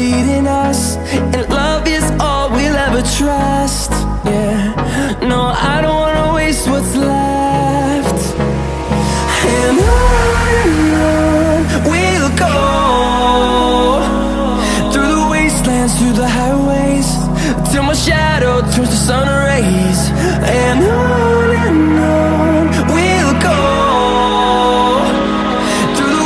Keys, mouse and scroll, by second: 1.1 right click, 2.3 click, 3.6 click, 11.0 click, 12.2 click, 13.1 click, 14.6 click, 17.1 click, 18.9 click, 19.9 click, 21.8 click, 22.7 scroll down 2, 23.2 scroll up 2, 25.1 click, 26.0 m.